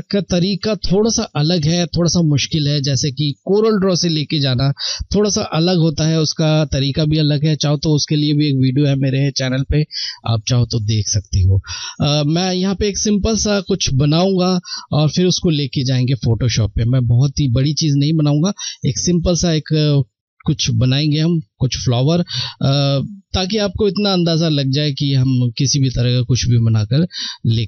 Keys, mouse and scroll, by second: 27.5 click.